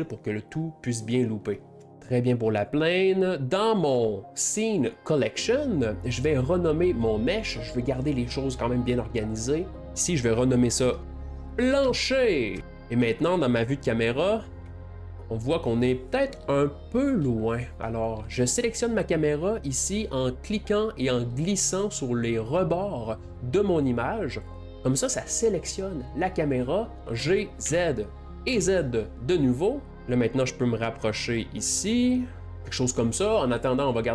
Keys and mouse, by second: 2.0 Left, 9.8 click, 12.8-14.2 middle drag, 14.6 KP_0, 15.2-18.3 ctrl+middle drag, 21.0 click, 27.2 g, 29.9 g.